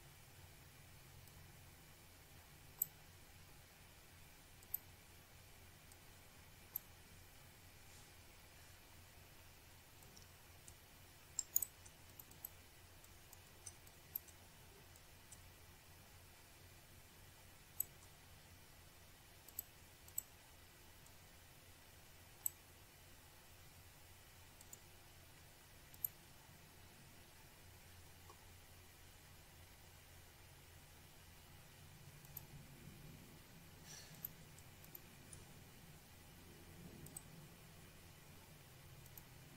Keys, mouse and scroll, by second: 1.5 click, 1.9 scroll down 1, 2.4-2.8 scroll up 1, 3.7 click, 7.0 click, 8.1 click, 9.2 scroll down 1, 9.5-9.9 scroll up 1, 12.0 click, 13.3 shift+right click, 14.0 click, 14.2 click, 14.3 double click, 14.9 click, 16.7 click, 21.0 click, 21.6 click, 22.5 click, 25.9 click, 27.2 click, 29.5 scroll down 1, 31.7-32.9 scroll up 1, 33.2 click, 35.0 click, 35.6 shift+click, 37.8 click.